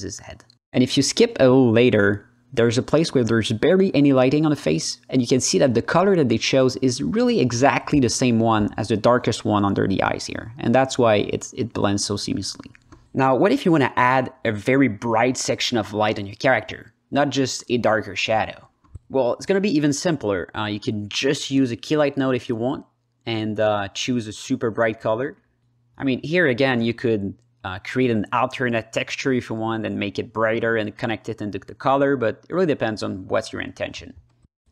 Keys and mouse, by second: 2.6 ctrl+z, 6.3 click, 7.5 click, 8.5 click, 9.1 ctrl+z, 9.8-13.0 drag, 13.0 Delete, 13.7 drag, 14.3 shift+a, 17.0 alt+middle click, 17.8 h, 18.2-18.8 drag, 19.1 middle click, 19.5 click, 26.6-27.3 drag, 27.7-28.6 drag, 28.9 alt+middle click, 29.4 ctrl+alt+middle click, 30.3-31.3 drag, 31.7-33.0 drag, 33.4 ctrl+alt+middle drag, 33.6-34.7 alt+middle drag.